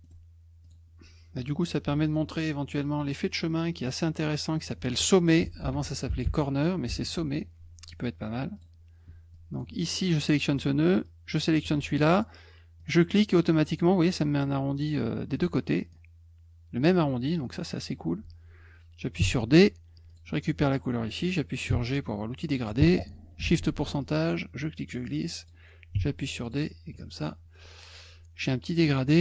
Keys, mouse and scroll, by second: 0.0 middle click, 0.6 click, 3.0 click, 3.8 click, 5.1-6.9 typing, 8.5 click, 9.3 click, 11.0 shift+click, 12.8 click, 15.9 click, 20.1 click, 21.7 g, 24.0-25.4 drag, 26.4 click.